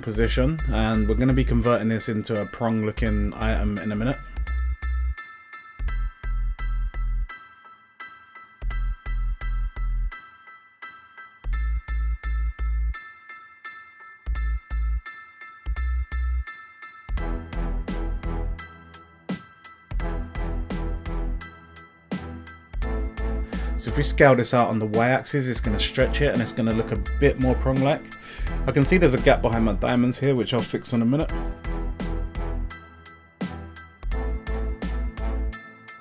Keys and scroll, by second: 4.7 s, 26.6 s, 27.4 y.